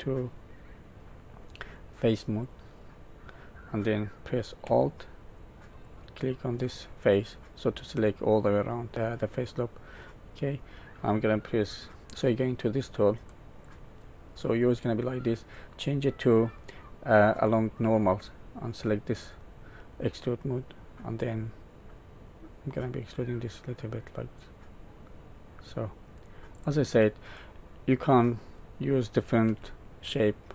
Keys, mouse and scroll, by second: 2.4 click, 5.8 alt+click, 7.3 middle click, 13.1 click, 14.0 click, 15.6 click, 21.2 click, 27.3 middle click, 29.4 Tab, 30.1 middle click.